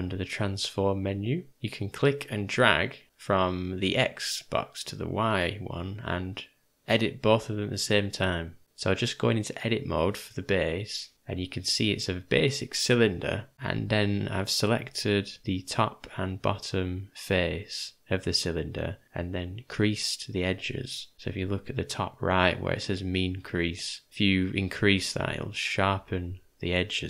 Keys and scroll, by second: 8.6 Tab, 8.6 3, 10.6 =, 11.1 ctrl+=, 11.6 ctrl+-, 12.3 alt+=, 13.4 =.